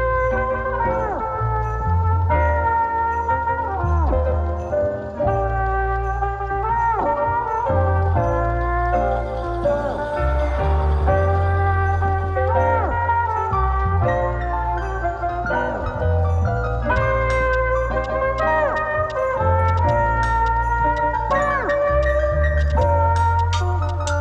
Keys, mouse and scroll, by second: 13.5 space, 13.8 click, 17.0 right click, 17.7 click, 18.7-20.2 typing, 21.5 click, 22.6 ctrl+space, 23.5-24.2 typing.